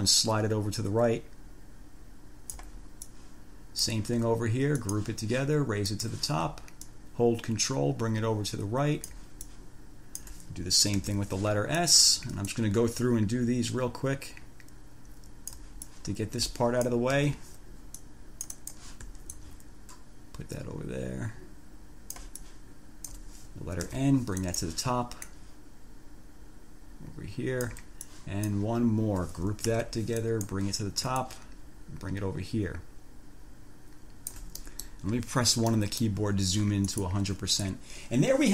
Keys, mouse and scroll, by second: 3.3 click, 5.0 click, 6.1 click, 7.1-9.5 ctrl+drag, 9.7 ctrl+click, 11.3 ctrl+g, 12.0 click, 12.7-15.9 ctrl+drag, 16.1-17.3 ctrl+drag, 17.4 ctrl+g, 18.2 click, 19.6-23.5 ctrl+drag, 24.1 ctrl+g, 24.7 ctrl+click, 25.5-28.1 ctrl+drag, 28.3 ctrl+click, 29.8 ctrl+g, 30.4 ctrl+click, 31.4-34.7 ctrl+drag, 34.9 ctrl+click, 35.3 ctrl+1, 35.9 click, 37.1 click.